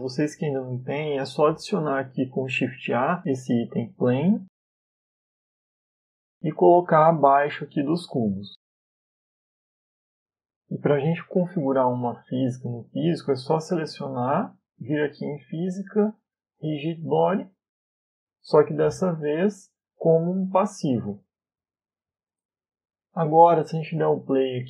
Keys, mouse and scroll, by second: 2.3 shift+a, 4.2-4.9 scroll down 3, 4.6 s, 7.4 middle click, 8.7 click, 12.5 Delete, 13.1 middle click, 13.8 right click, 16.4 click, 17.9 click, 19.9 click, 22.9-23.3 scroll down 1, 23.8 middle click, 24.2-24.6 scroll up 4.